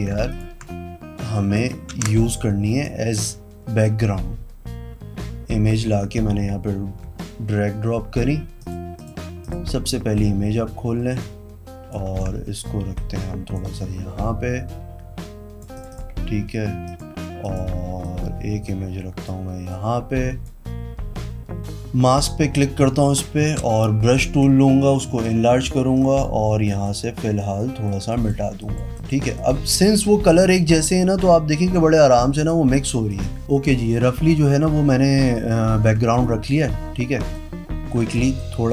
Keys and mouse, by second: 0.2 ctrl+click, 1.5-2.8 alt+drag, 1.9 alt+Tab, 8.5 click, 8.9 click, 9.4 click, 10.1 click, 12.0 ctrl+t, 12.9 click, 13.7-15.6 drag, 15.7 click, 16.8 click, 17.4 click, 18.0-19.0 drag, 19.6 click, 22.1 click, 23.6-25.8 typing, 26.0 click, 27.5 click, 28.1 click, 28.6 click, 28.9 click, 29.3 click, 32.3 click, 33.1 click, 36.1 ctrl+click, 36.4 ctrl+t, 37.3 click, 38.3 click.